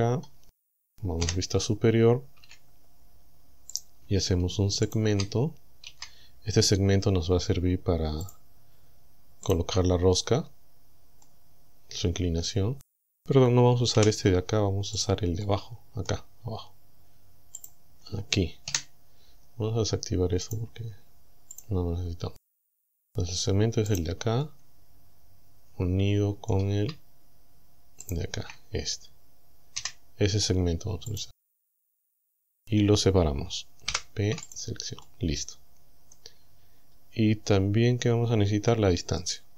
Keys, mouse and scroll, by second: 1.2 KP_7, 2.4 a, 3.8 right click, 4.9 shift+right click, 5.9 f, 8.3 click, 9.5 right click, 11.2-13.0 middle drag, 14.0 Delete, 15.0 click, 15.4 scroll up 2, 15.4 middle click, 16.2 scroll down 2, 17.6 click, 18.7 KP_7, 20.5 click, 21.6 click, 23.9 right click, 24.4-26.0 middle drag, 26.0 right click, 28.1 shift+right click, 29.8 f, 31.1 click, 32.3 right click, 33.9 p, 34.5 click, 35.0-36.4 middle drag, 36.6-37.0 scroll down 1, 38.7 middle click.